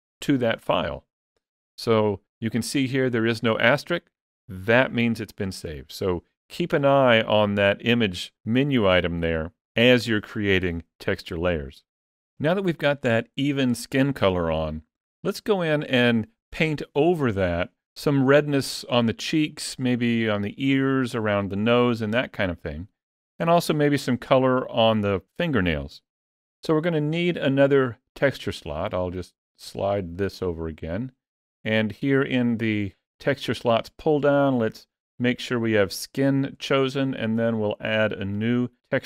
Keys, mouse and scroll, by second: 28.6 middle click, 32.9 click.